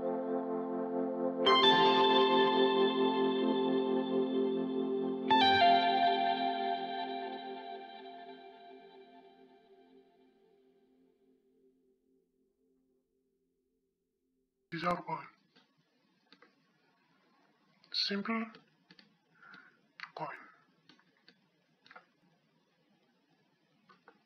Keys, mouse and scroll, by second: 2.1-4.0 drag, 4.0-5.8 middle drag, 5.4-8.6 drag, 8.3-10.0 middle drag, 11.7-13.7 middle drag, 14.9-16.8 middle drag, 17.5-22.0 middle drag.